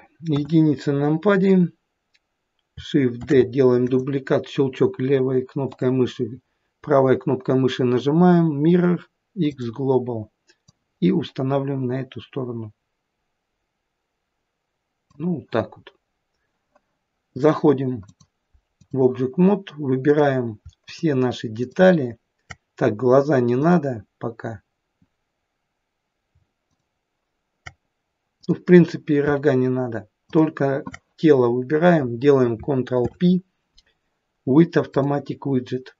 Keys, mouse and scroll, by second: 0.3 KP_1, 1.5-2.7 scroll down 1, 3.2 shift+d, 5.7 right click, 10.7 click, 17.4 click, 18.1 click, 20.9 shift+click, 21.6 shift+click, 23.6 click, 28.4 click, 30.3 shift+click, 33.0 ctrl+p.